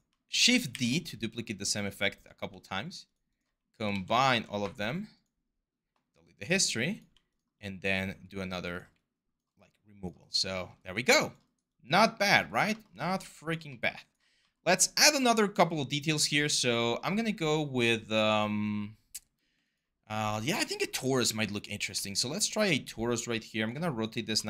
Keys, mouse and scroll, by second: 0.2 d, 0.5 d, 3.7 ctrl+z, 9.7-20.9 alt+drag, 20.9 r, 21.7 e, 23.5-24.4 alt+drag.